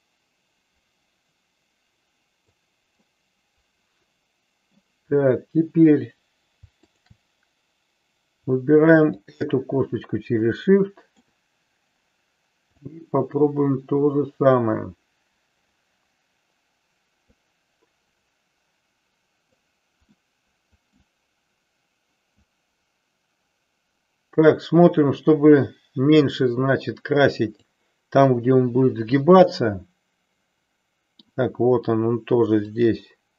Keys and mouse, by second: 3.1-4.7 middle drag, 10.6 middle click, 12.8-19.5 drag, 20.2 middle click, 22.5-27.7 drag, 28.3-31.3 middle drag, 32.7-33.3 drag.